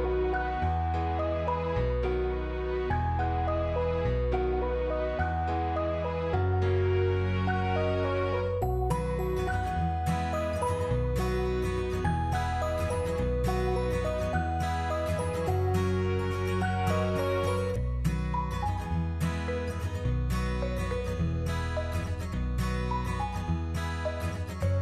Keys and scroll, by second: 2.6 5, 3.0 Return, 5.0 3, 5.2 Return, 6.6 2, 7.1 Return, 8.0 1, 8.3 Return, 11.0 5, 11.2 Return, 17.5 ctrl+-, 18.3 ctrl++.